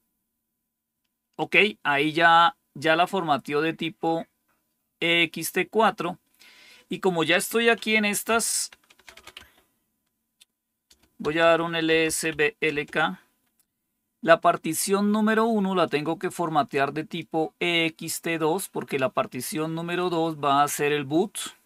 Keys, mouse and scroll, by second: 7.9-9.3 typing, 10.9-12.7 typing, 15.8-17.1 drag.